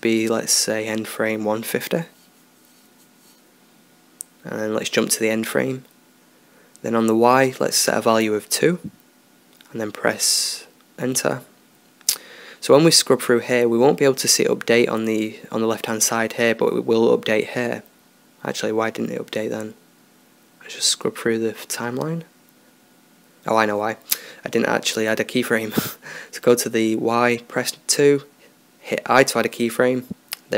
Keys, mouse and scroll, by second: 0.6-2.5 drag, 5.8-9.3 drag, 13.1-14.9 drag, 17.9 Left, 19.2 Left, 19.6 Left, 21.2-22.8 drag, 23.6-28.1 drag.